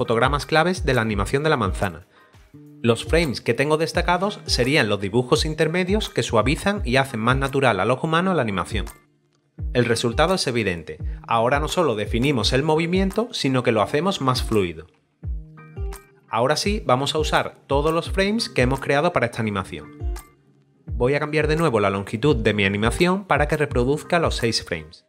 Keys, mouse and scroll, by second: 16.3 click, 21.5 click, 22.6 click, 23.7 6, 24.7 click.